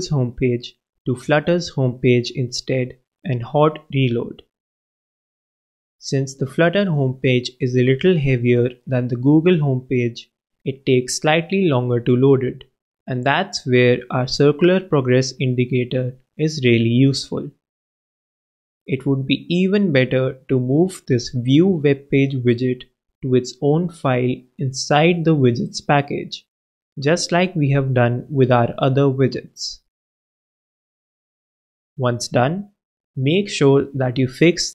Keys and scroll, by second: 1.3 shift+Right, 1.8 shift+d, 2.4 super+v, 2.6 super+s, 4.5 super+s, 24.3 shift+super+x, 24.7 super+BackSpace, 28.3-29.8 typing, 32.2 super+Return, 32.7 super+Return, 32.9 super+v, 34.5 alt+Return.